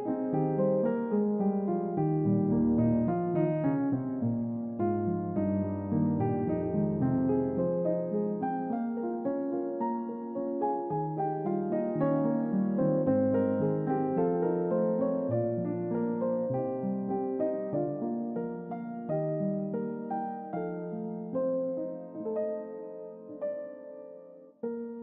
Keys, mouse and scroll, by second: 2.2 click, 4.1 scroll down 2, 4.7 g, 7.8-8.7 scroll down 3, 8.9 shift+middle click, 10.5 g, 12.8 click, 14.1-14.7 scroll down 2, 16.9 click, 19.9 3, 20.1 click, 23.3 click, 24.4 click, 24.9-25.0 scroll up 2.